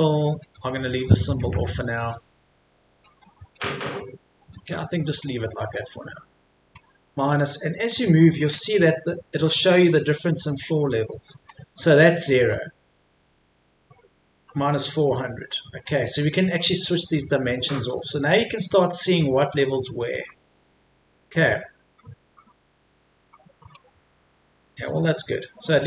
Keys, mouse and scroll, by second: 6.7-7.4 scroll down 1, 8.3 middle click, 9.3-9.9 scroll up 1, 9.9-10.5 scroll down 1, 10.5 middle click, 11.5-11.9 scroll up 1, 13.9 middle click, 17.7 scroll up 1, 19.7 middle click, 20.3-22.0 scroll down 1, 22.0 middle click, 22.8-23.3 scroll down 1, 23.3 middle click, 23.7-24.3 scroll down 1, 24.3 Escape, 25.1-25.8 scroll up 1.